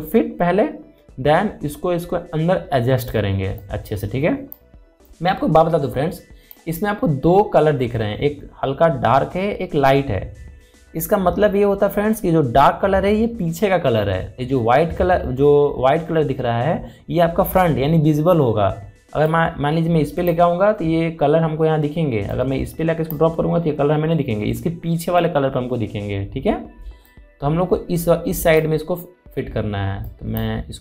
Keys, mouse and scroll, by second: 4.3-9.7 drag, 19.9-27.7 drag, 27.7-30.8 drag.